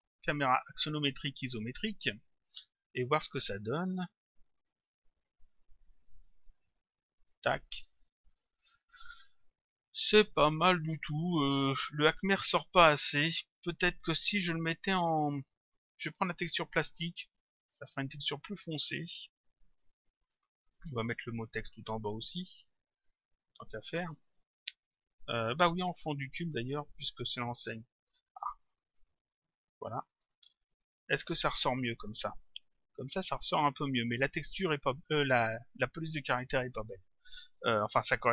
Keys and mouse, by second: 1.5 click, 5.5 click, 7.2 click, 17.6 click, 21.1 click, 24.7 click, 27.2 click, 28.9 click, 30.1 click.